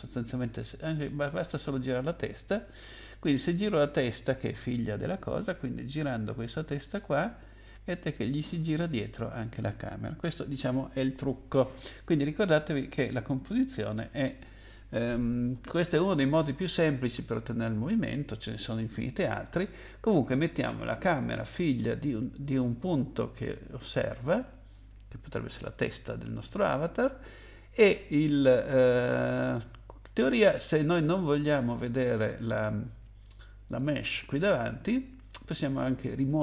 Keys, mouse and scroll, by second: 0.4 click, 7.1 click, 10.5 ctrl+z, 21.0 click, 22.4 click, 33.7 click.